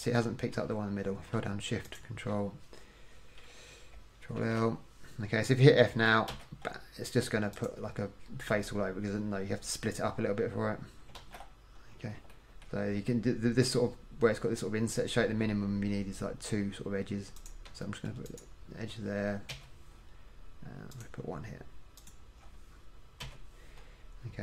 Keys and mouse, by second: 4.0 middle click, 4.5 ctrl+l, 6.4 f, 11.3 ctrl+z, 19.7 f, 23.4 f.